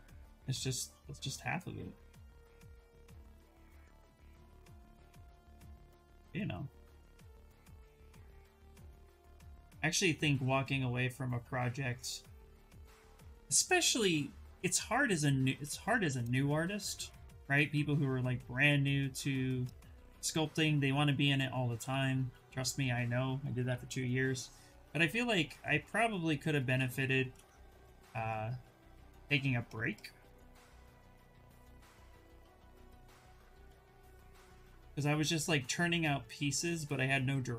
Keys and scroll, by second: 16.5 ctrl+z, 26.5 s.